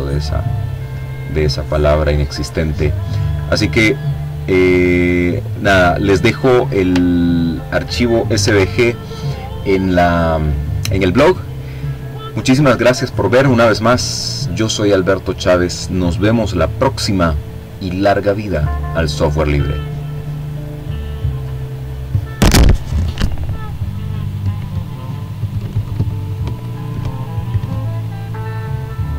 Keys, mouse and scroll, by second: 0.7-1.7 drag, 2.1-4.3 drag, 4.3-4.8 ctrl+scroll down 1, 5.6 ctrl+s, 17.5 click, 18.5-29.1 drag.